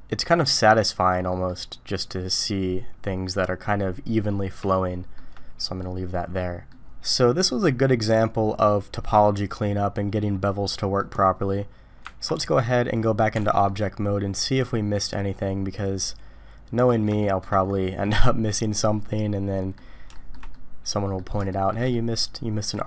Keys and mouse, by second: 1.0 middle click, 4.7 shift+middle click, 5.8 middle click, 7.4-11.0 middle drag, 12.0 Tab, 13.4 alt+a, 13.7-16.9 middle drag, 17.2 shift+middle click, 18.0-19.7 middle drag, 20.1 shift+middle drag, 20.5-21.2 middle drag, 21.5 shift+middle drag, 21.9-22.7 middle drag.